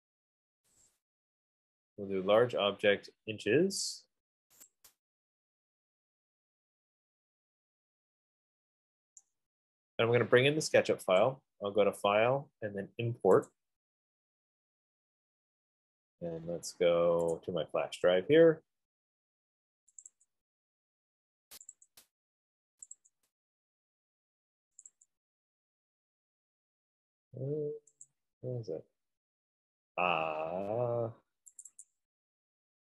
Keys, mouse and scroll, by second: 1.1 click, 4.9 click, 11.5 click, 13.9 click, 17.7 click, 20.3 click, 20.6 click, 22.0 click, 22.2 click, 23.2 click, 23.3 click, 25.2 click, 25.5 click, 28.5 click, 30.9 F15, 32.1 click, 32.3 click.